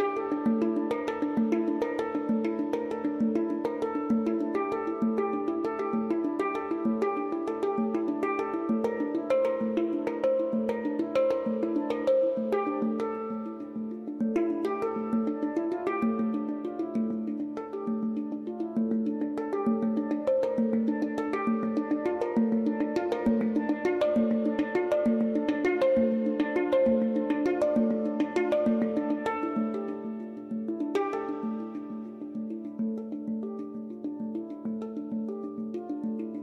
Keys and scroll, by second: 1.0 9, 1.0 Return, 3.8 x, 4.3 x, 15.6 x.